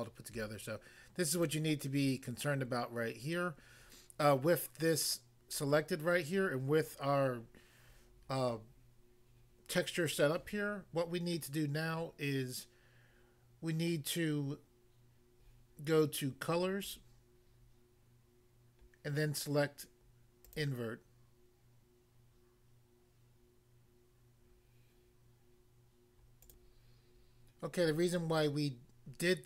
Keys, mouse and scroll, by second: 1.4 click, 16.8 click, 20.5 click, 26.4 click, 26.6 click.